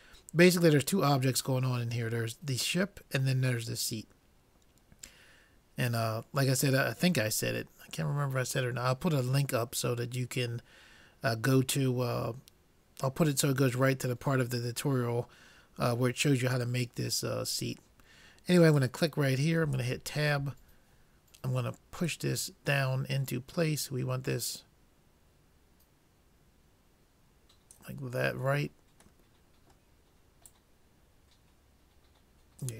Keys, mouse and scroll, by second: 18.8-20.3 drag, 19.7 Tab, 21.0-22.0 middle drag, 22.0-23.8 drag, 28.2-29.5 middle drag, 30.5-32.4 drag.